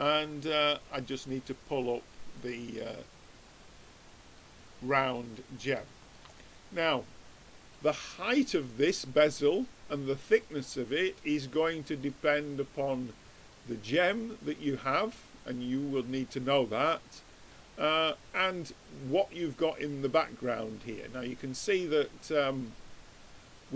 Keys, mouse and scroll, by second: 0.2-1.3 drag, 2.4-4.0 drag, 4.4-7.9 middle drag, 9.3 click, 10.3-12.1 middle drag, 14.1 click, 15.2-16.9 drag, 16.3-18.0 middle drag, 19.2-23.7 middle drag.